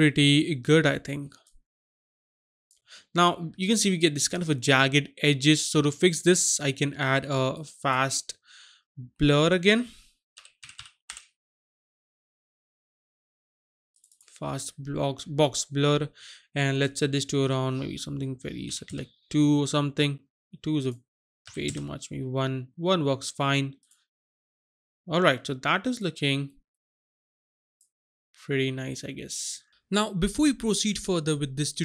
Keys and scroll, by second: 10.6-11.0 typing, 18.7 KP_2, 18.8 Return, 21.5 KP_1, 21.6 Return.